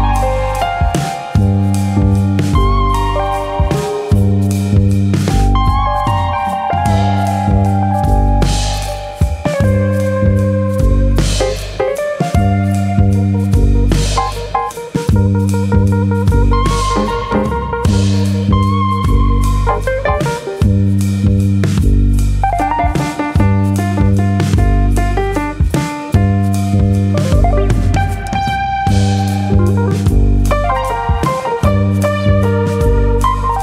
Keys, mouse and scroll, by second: 0.3 click, 0.5 middle click, 1.8 e, 2.4 click, 2.6 middle click, 3.5 KP_1, 9.2 click, 10.1 click, 11.4 shift+click, 11.9 shift+click, 11.9 middle click, 12.6 click, 13.6 middle click, 14.4 click, 14.8 shift+click, 15.1 shift+click, 16.4 shift+click, 16.4 middle click, 17.4 i, 19.9 click, 20.1 middle click, 20.8 click, 21.8 middle click, 22.1-22.6 scroll up 2, 22.3 shift+middle click, 22.7 middle click, 22.9-23.2 scroll down 1, 23.9 2, 24.0 click, 24.3 middle click, 25.0 click, 25.8 middle click, 26.6 1, 26.7 click, 27.3 click, 30.7 click, 31.5 click, 33.0 click.